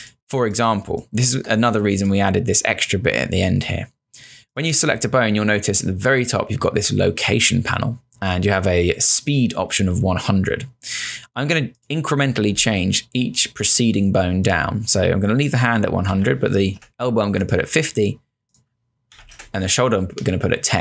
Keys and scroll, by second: 0.0 space, 15.8-16.6 typing, 16.9 Return, 18.9-19.8 typing.